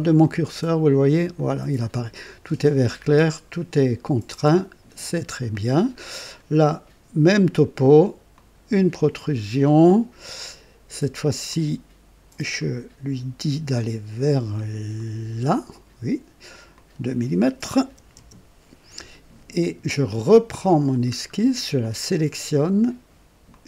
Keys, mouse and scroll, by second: 1.3 click, 4.3 click, 5.5-6.3 drag, 8.3 click, 11.4 click, 12.5 click, 14.9 click, 16.7 click, 17.8 KP_2, 18.1 Return, 20.4 click, 21.1 scroll down 1, 21.8 click, 23.4 click.